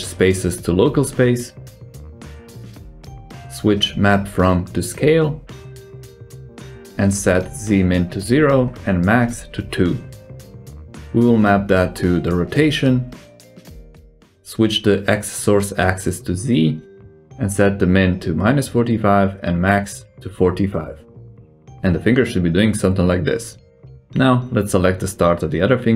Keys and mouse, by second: 1.0-1.8 drag, 2.3-3.1 drag, 4.8 click, 8.2-10.3 drag, 10.8 click, 13.7 click, 15.2-16.6 drag, 17.3-19.7 drag, 20.4 right click, 20.8 s, 24.6-25.6 shift+drag.